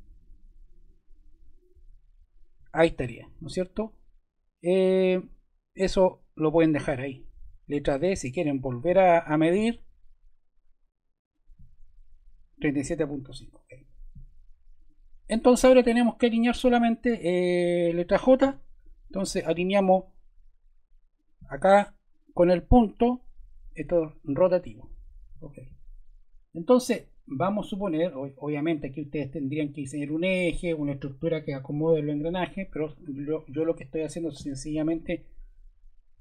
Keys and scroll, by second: 7.7 d, 18.4 j.